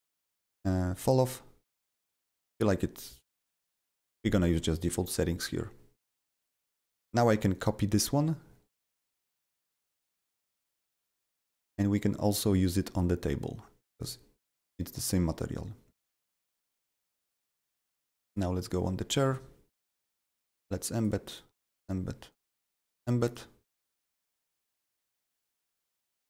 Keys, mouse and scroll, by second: 0.4 click, 2.1 click, 7.5 click, 12.5 click, 14.0 click, 16.3 click, 17.6 click, 18.3 click, 19.3 click, 20.3 click, 21.0 click, 21.3 click, 21.7 click, 22.3 click, 22.7 click, 22.9 double click, 23.3 click, 24.9 click, 25.7-26.2 drag.